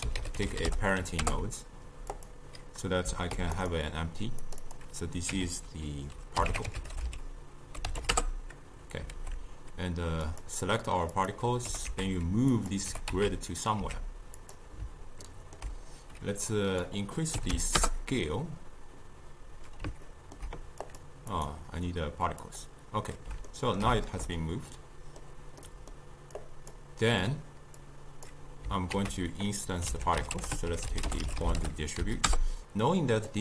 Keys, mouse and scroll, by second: 3.4 shift+d, 4.5 click, 4.7-7.9 drag, 9.2 alt+g, 10.3 click, 11.7 g, 12.9 g, 15.3-16.5 ctrl+middle drag, 16.5-19.6 drag, 20.1-20.9 ctrl+middle drag, 20.9 click, 21.4 click, 23.5-26.4 ctrl+middle drag, 26.4 click, 27.9-29.0 drag, 29.0 ctrl+a.